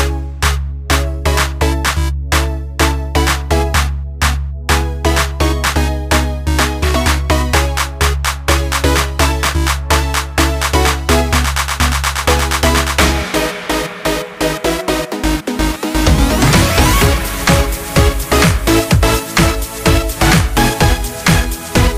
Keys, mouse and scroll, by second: 0.8-7.5 drag, 8.4 click, 11.5 click, 14.5 click, 16.7 click.